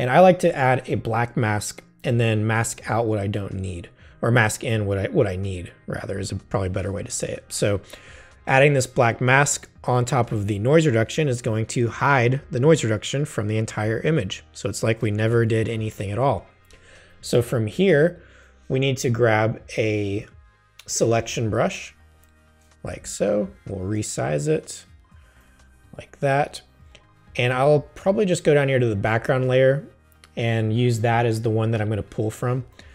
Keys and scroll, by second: 11.5 space, 15.5 super+0.